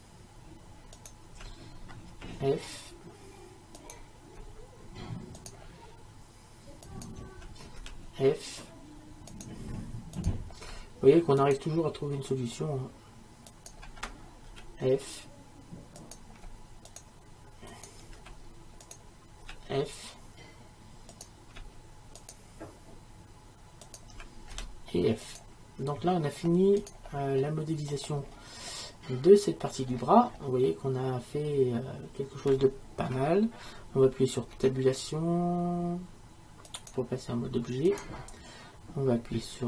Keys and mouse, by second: 2.2 f, 7.9 f, 9.4-11.4 right drag, 11.5-13.4 right drag, 13.5-19.5 right drag, 14.6 f, 18.2 shift+f, 19.5 f, 19.6 right click, 24.6 f, 27.9 middle click, 28.1 right click, 28.3-32.7 middle drag, 34.6 Tab, 36.7-39.6 right drag.